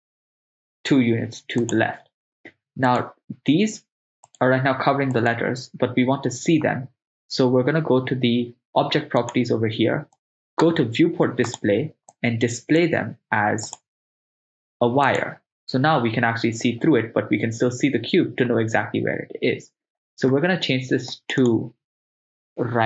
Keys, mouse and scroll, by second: 1.7 ctrl+click, 3.1 right click, 4.4 click, 4.4 right click, 5.4-8.2 drag, 5.4 right click, 9.2 click, 10.1 click, 11.5 click, 12.1 click, 13.7-15.3 drag, 21.1-22.8 drag.